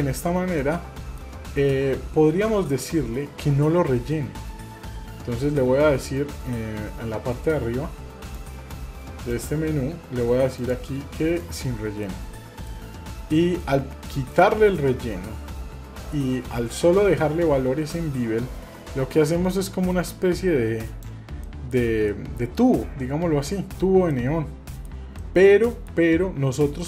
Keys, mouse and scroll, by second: 0.6-1.2 middle drag, 1.4-1.8 scroll up 1, 2.0-2.9 scroll down 1, 4.1-4.6 scroll up 3, 4.6 scroll down 1, 7.0-7.4 scroll up 2, 7.5-7.9 scroll down 2, 7.9-8.3 scroll up 1, 8.3 click, 9.3 click, 10.6 click, 12.1 middle click, 12.7 scroll up 1, 13.6 middle click, 14.4 shift+middle click, 15.7 scroll down 2, 16.6-17.4 scroll down 1, 17.4-17.8 scroll down 2, 17.9-21.1 drag, 21.4 shift+middle click, 22.1-22.4 middle drag, 22.4 scroll down 2, 22.8-23.4 middle drag, 23.6 scroll up 1, 24.1 middle click, 25.2-25.9 shift+middle drag.